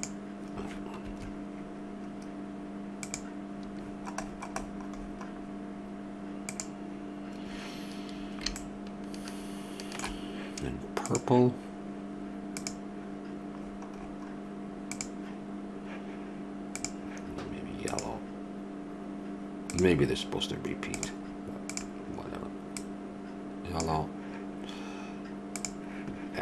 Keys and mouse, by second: 8.6-10.5 middle drag, 11.0-15.8 drag, 16.8-26.4 drag.